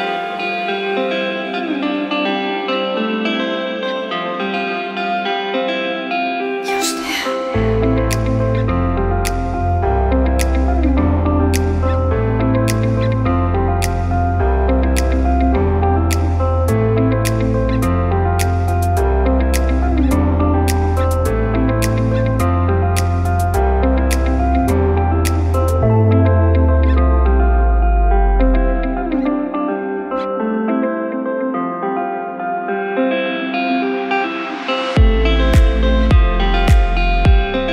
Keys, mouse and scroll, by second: 2.4 click, 3.4 ctrl+click, 4.4 click, 5.1 click, 5.9 click, 6.9 shift+click, 7.7 shift+click, 8.6 click, 9.9 shift+click, 10.8 shift+click, 11.8 click, 13.1 shift+click, 13.8 shift+click, 14.7 click, 15.9 shift+click, 16.9 shift+click, 17.7 click, 19.0 shift+click, 19.7 shift+click, 20.4 click, 21.8 shift+click, 22.6 shift+click, 24.2 shift+click, 25.6 shift+click, 26.3 shift+click, 27.2 shift+click, 28.1 click, 29.8 shift+click, 30.6 shift+click, 31.3 KP_7, 32.3 s, 37.0 click, 37.6-37.7 scroll down 4.